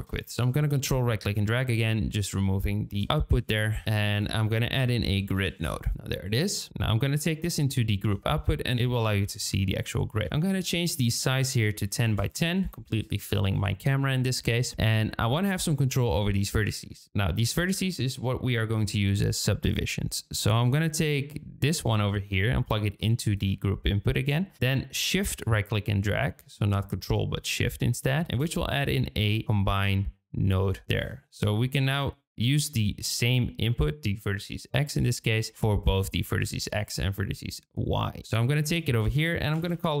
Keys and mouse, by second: 0.7 ctrl+click, 3.6 shift+click, 3.8 shift+a, 5.9 click, 6.8-8.0 drag, 10.1-12.7 drag, 21.8-23.3 drag, 25.4-27.9 shift+drag, 29.4-31.0 drag, 38.6-40.0 drag.